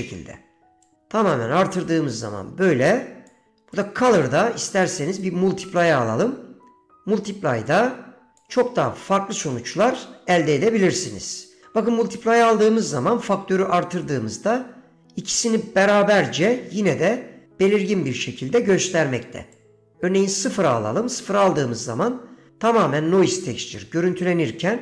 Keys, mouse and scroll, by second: 1.0-3.5 drag, 3.9-5.4 drag, 7.8-8.6 drag, 19.7 click, 21.3 middle click, 22.2 middle click, 23.9 middle click.